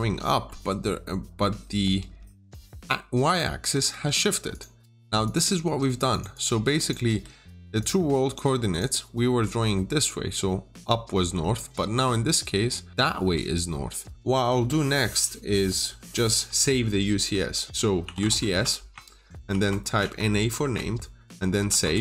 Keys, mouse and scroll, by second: 0.1 middle click, 1.7 typing, 2.3 click, 3.5 Escape, 3.8 typing, 4.4 click, 5.5 click, 6.2 double click, 7.3 Return, 7.7 click, 17.9 typing, 18.3 Return, 19.4-19.9 typing, 20.5 Return, 21.8 Return.